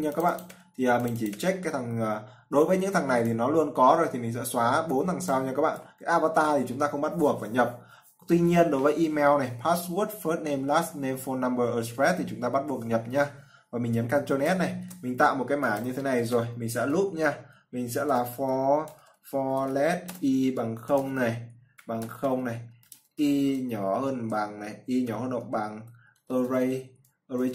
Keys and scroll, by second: 14.9 ctrl+s.